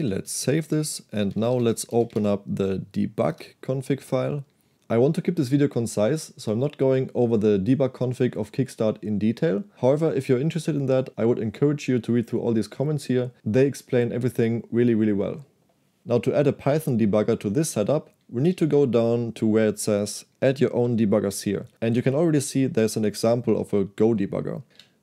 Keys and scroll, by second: 0.0-2.7 typing, 3.4 Return, 18.5-21.3 typing, 23.0 Escape, 24.7 p.